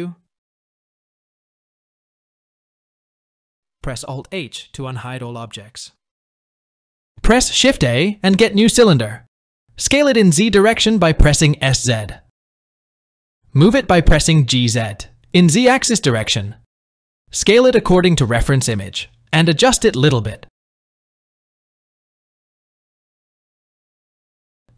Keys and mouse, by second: 0.4 Tab, 3.8 alt+h, 6.7 click, 7.7 shift+a, 10.6 s, 13.1 g, 15.9-16.7 shift+middle drag, 17.4 s, 21.3 s, 22.4 g, 22.9 s, 23.9 Tab.